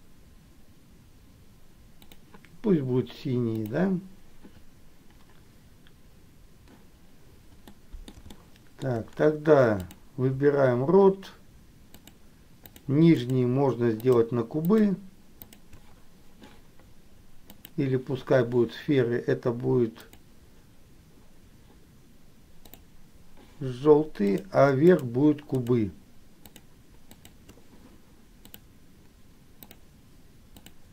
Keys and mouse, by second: 3.8 click, 7.9 middle click, 8.6 shift+middle click, 12.2 shift+click, 12.8 shift+click, 13.3 shift+click, 14.8 shift+click, 15.7 shift+click, 17.8 click, 20.3 click, 24.5 click, 25.1 shift+click, 25.8 shift+click, 26.8 shift+click, 27.3 shift+click, 28.7-30.2 drag, 30.7 click.